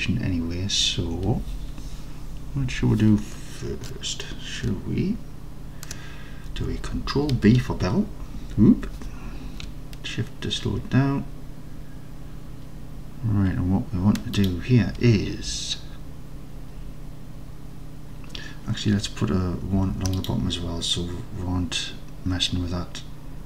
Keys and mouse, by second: 7.4 ctrl+b, 14.5 shift+click, 19.8 ctrl+r.